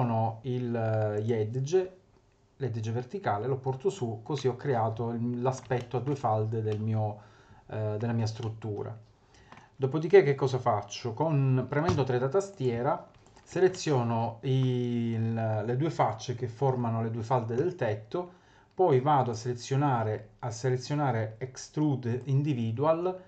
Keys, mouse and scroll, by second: 1.1 click, 2.8 click, 4.4 middle click, 5.1 middle click, 5.8 shift+middle click, 6.1 shift+middle click, 6.3-6.7 scroll up 3, 6.7 middle click, 8.2 scroll down 3, 8.8 middle click, 11.9 3, 12.5 click, 13.2 shift+click, 13.7 middle click, 19.3 click.